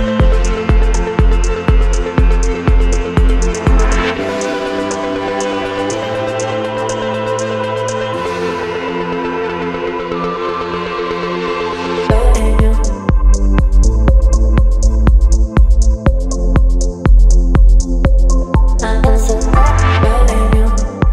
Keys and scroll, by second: 9.3 Return, 18.7 Right, 18.9 Right, 19.0 Right, 19.1 Right, 19.3 Right, 19.6 Right, 20.3 Right, 20.4 Right, 20.5 Right, 20.7 Right.